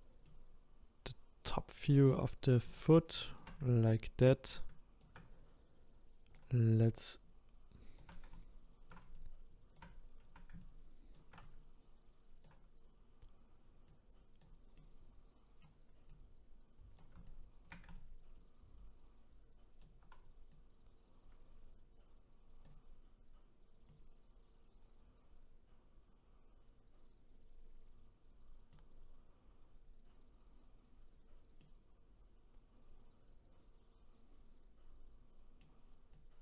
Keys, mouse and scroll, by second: 2.7-14.8 shift+right drag, 14.8-16.1 middle drag, 16.1-23.9 right drag, 23.9-27.0 drag, 31.6-34.6 middle drag, 36.1-36.4 right drag.